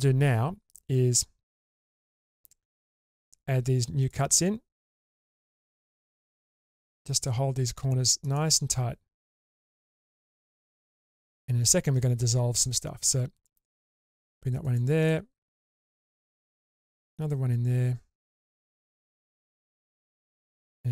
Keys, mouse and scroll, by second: 1.7 k, 4.9-5.8 scroll down 3, 12.0-12.9 scroll up 1.